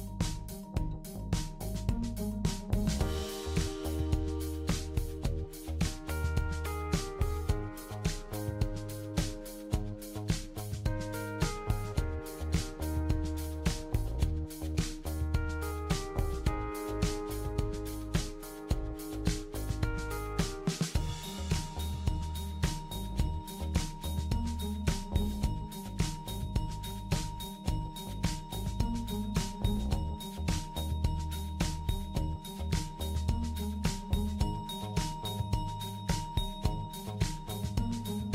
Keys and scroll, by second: 24.2-26.4 typing, 35.6-38.3 typing.